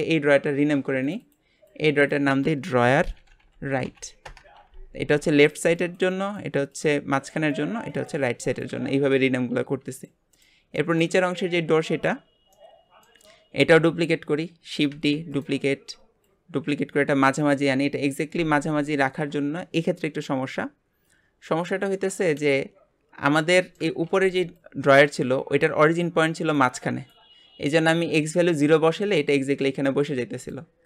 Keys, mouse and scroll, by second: 1.0 click, 1.2-4.2 drag, 9.9 click, 10.3 click, 10.7-13.3 shift+middle drag, 13.3 scroll up 1, 14.9 shift+d, 16.2 click, 23.5-30.8 shift+middle drag.